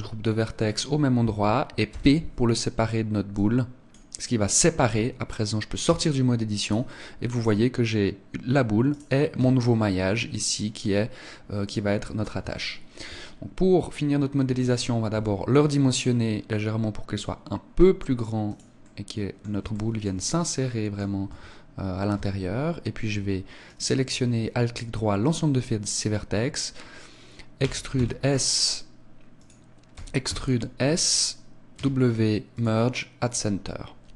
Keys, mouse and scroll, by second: 1.8 p, 5.8 Tab, 6.7 right click, 7.3 right click, 9.3 Tab, 11.6 middle click, 12.5 shift+middle click, 13.2-13.8 scroll up 4, 15.1 s, 18.5 click, 18.7 middle click, 19.7 shift+middle click, 20.2 middle click, 21.2 Tab, 22.1 Tab, 23.6 alt+right click, 27.5 e, 29.4 click, 29.9 e, 31.1 click.